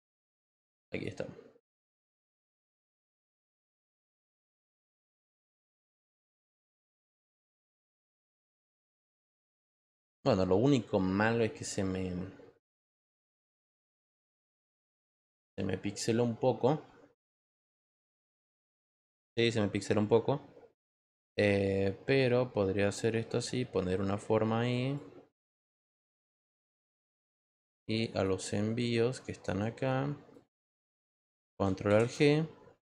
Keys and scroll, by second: 9.1 Return.